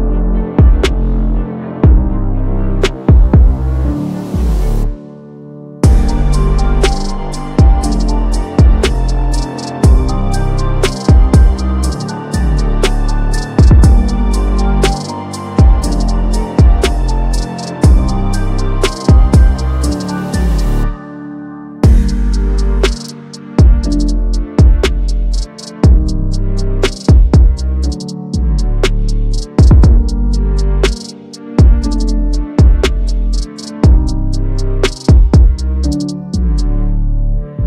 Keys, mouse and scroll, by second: 1.0 ctrl+j, 2.2 click, 3.5 ctrl+c, 3.9 ctrl+v, 5.6 click, 6.2 ctrl+z, 8.0 click, 9.1 ctrl+c, 9.5 ctrl+v, 10.3 click, 16.6 click, 19.7 click, 21.9 click, 23.5 click, 24.2 Down, 24.4-26.1 scroll down 1, 26.7 click, 29.8 click, 32.3 click, 32.5 ctrl+click, 33.4 right click, 34.9 click, 36.4-37.6 drag.